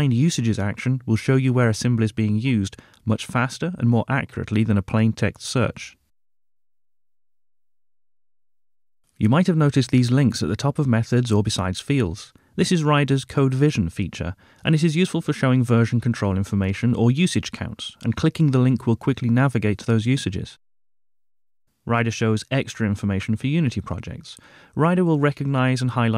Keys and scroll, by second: 1.6 ctrl+shift+n.